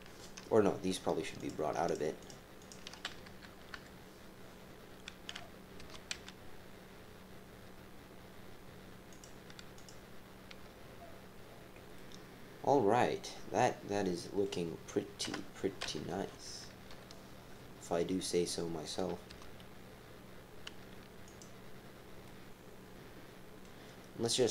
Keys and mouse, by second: 1.4 click, 2.0 shift+click, 2.6 shift+click, 3.2 KP_3, 3.7 KP_1, 5.8 g, 9.7 click, 11.9 click, 12.7-14.4 middle drag, 15.2 KP_7, 16.1 KP_2, 16.6 KP_3, 16.9 KP_1, 18.2 click, 19.3 g, 22.2-23.6 drag.